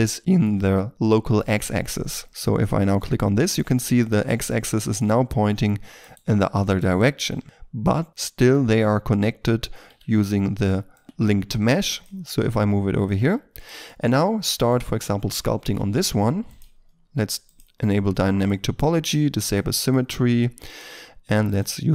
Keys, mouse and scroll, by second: 2.3 right click, 2.4 middle click, 3.3-4.5 scroll up 1, 4.5 scroll down 1, 4.7 shift+middle click, 5.9 right click, 8.6 r, 9.8 z, 11.0 x, 12.2 r, 13.1 g, 13.8 middle click, 14.6 right click, 15.0 scroll up 1, 15.3 Tab, 15.9-16.2 scroll up 1, 16.2 f, 19.4 double click.